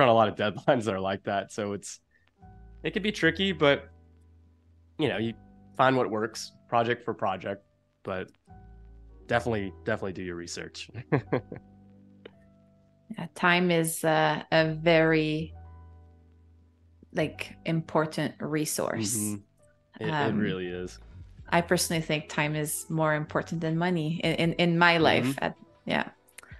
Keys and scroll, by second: 0.2 a, 3.8 space, 8.3 space, 10.9 p, 12.6 super+u, 19.6 shift+super+[, 21.3 v, 24.2 super+c, 24.6 BackSpace, 26.2 super+f.